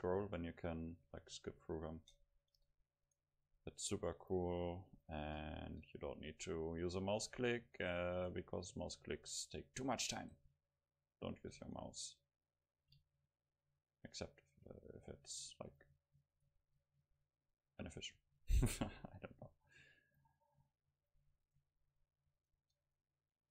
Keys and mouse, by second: 2.1 middle click, 3.1-5.0 right drag, 4.3-6.8 drag, 5.8 right click, 6.8 middle click, 7.0-10.9 right drag, 10.2-11.9 drag, 11.6 Tab, 13.1 Tab, 14.2-15.7 right drag, 16.2 click, 16.5-18.9 drag, 16.5-18.9 right drag, 18.9 Delete, 21.1-23.0 drag.